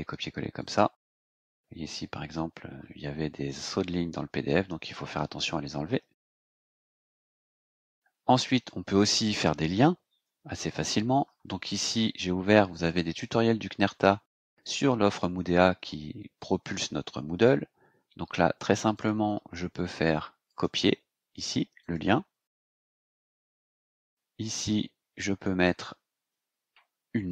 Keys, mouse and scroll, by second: 0.5 click, 1.5 space, 2.0 Delete, 3.8 scroll down 2, 7.0 click, 7.5 click, 10.1 Return, 12.7 click, 18.9 click, 20.4 click, 21.8 click, 22.8 click, 24.5 click, 25.1 scroll down 2, 27.2-27.3 typing.